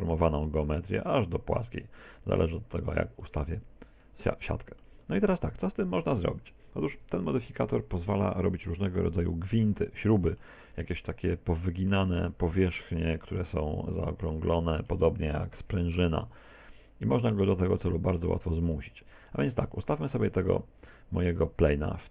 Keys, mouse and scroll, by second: 3.2 middle click, 4.2 middle click, 5.0 middle click, 6.9 Tab, 7.9 z, 8.4 scroll down 2, 8.8 middle click, 9.9 middle click, 10.8 middle click, 13.8 z, 14.6 middle click, 17.9 middle click, 18.5 Tab, 18.8 middle click, 20.7 z, 21.4 middle click.